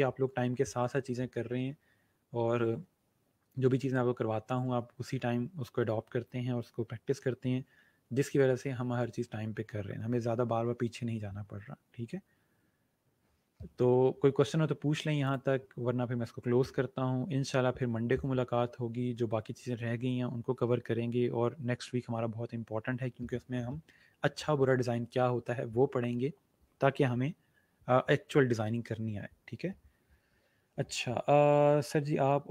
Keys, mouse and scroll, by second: 15.2 click.